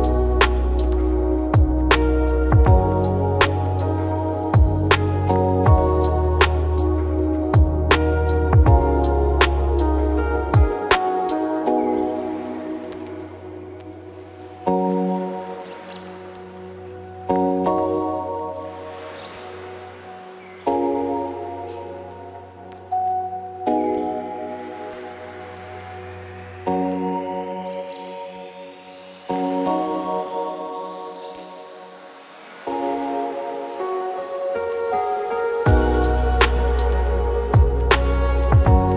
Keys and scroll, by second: 30.5 ctrl+t.